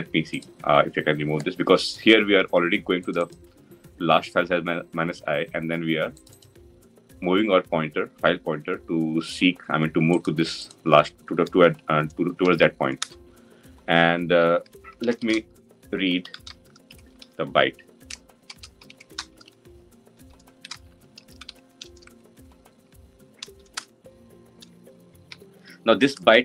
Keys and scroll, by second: 23.5 Return.